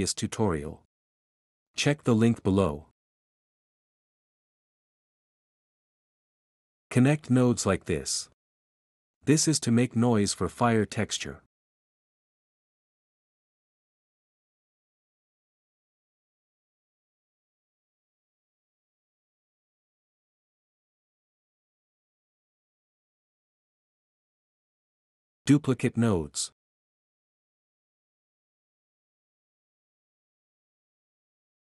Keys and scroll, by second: 1.1-1.8 typing, 5.4 o, 6.6 o, 6.9 o, 7.1 o, 11.4 u, 11.9 a, 12.5 m, 15.1-17.3 typing, 19.1 ., 19.8 3, 23.4 typing, 31.1 ctrl+c, 31.3 ctrl+v.